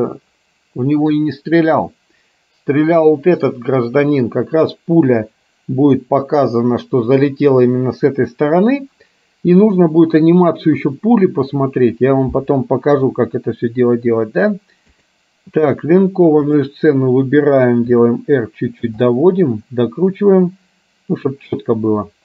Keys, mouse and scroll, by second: 13.1 KP_7, 15.1 click, 18.0 r, 19.2-21.6 middle drag.